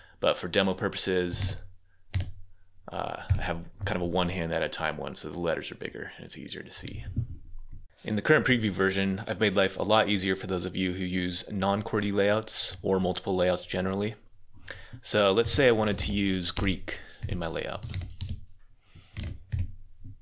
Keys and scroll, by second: 0.9-2.0 typing, 15.0-18.5 typing, 19.0 Escape.